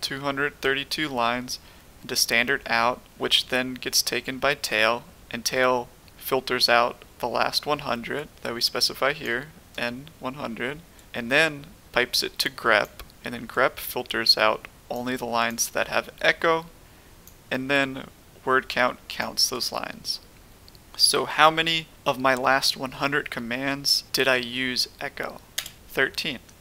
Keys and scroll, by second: 25.5 Return.